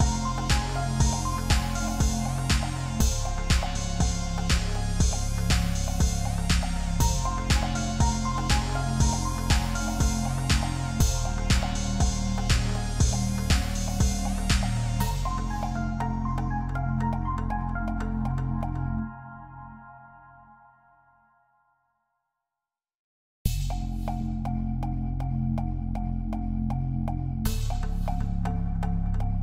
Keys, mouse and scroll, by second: 6.3 double click, 8.4 Up, 8.5 Up, 8.6 Up, 9.2 Return, 10.7 typing, 11.2 Return, 11.3 Return, 12.3 Return, 12.4 ctrl+z, 13.8 double click, 15.8-16.5 typing, 18.6-19.2 typing, 24.9 F10, 26.1 ctrl+r.